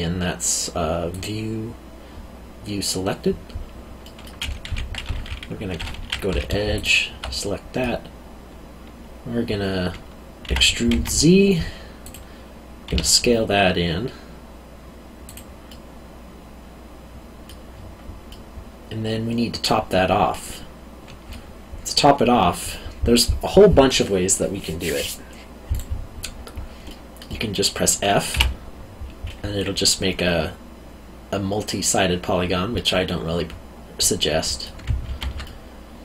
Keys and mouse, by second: 1.1 click, 4.0 middle click, 4.6 2, 6.7 alt+click, 7.4 middle click, 10.4 e, 10.9 z, 12.0 click, 12.9 s, 15.2 click, 15.7 middle click, 18.3 middle click, 20.5 middle click, 25.7 right click, 26.8 middle click, 28.3 f, 32.7 middle click, 35.0 ctrl+z, 35.4 middle click.